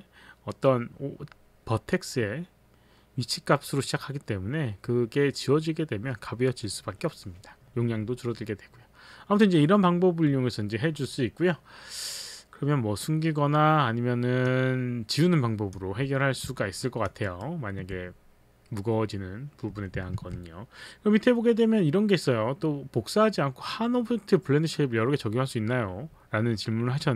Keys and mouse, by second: 14.4 click, 16.8 alt+click, 17.3 alt+right click, 17.9 alt+right click, 20.2 alt+Tab.